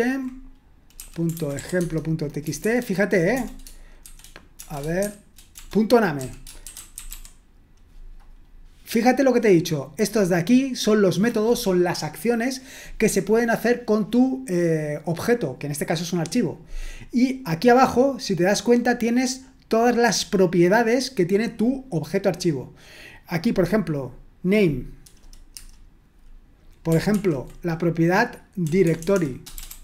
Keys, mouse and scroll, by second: 0.7-7.6 typing, 9.4-10.1 scroll up 1, 10.1-10.9 scroll up 1, 16.7-18.2 scroll down 1, 20.1-21.0 scroll down 2, 23.7-26.8 drag, 27.2 ctrl+p, 28.6-29.8 typing.